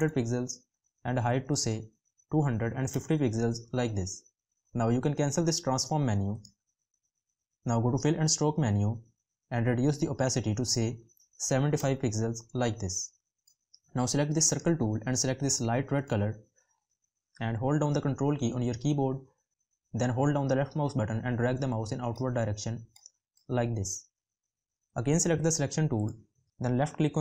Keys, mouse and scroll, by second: 17.1 ctrl+click.